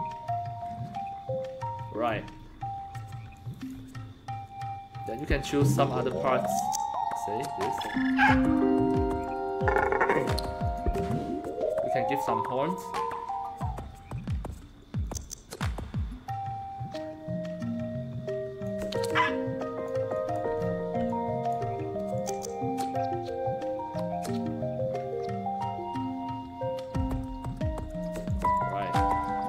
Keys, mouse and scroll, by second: 2.3-2.7 scroll up 1, 3.3 alt+click, 5.0 click, 6.4-7.7 drag, 8.2-9.8 alt+drag, 10.6 click, 15.0-18.6 drag, 18.9 alt+click, 20.1 alt+click, 20.5 scroll up 1, 21.0 alt+click, 22.1-28.0 drag, 28.2-29.4 alt+drag.